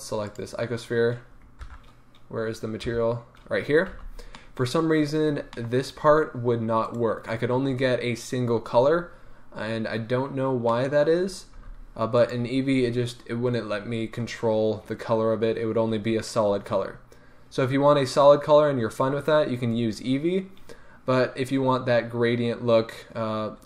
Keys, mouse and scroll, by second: 1.7 shift+F3, 4.0 n, 4.3-6.8 middle drag, 4.8-5.5 scroll up 2, 6.8-8.3 right drag, 9.3-10.6 scroll up 1, 10.7-12.2 middle drag, 11.5 g, 12.2 click, 14.5-16.3 scroll down 1.